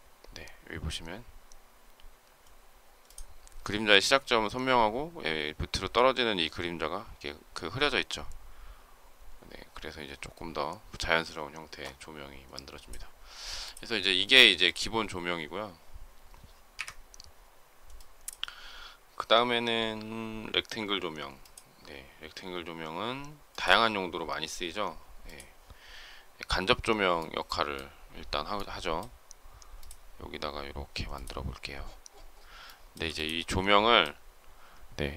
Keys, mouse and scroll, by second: 16.6 Delete, 32.5 shift+middle click.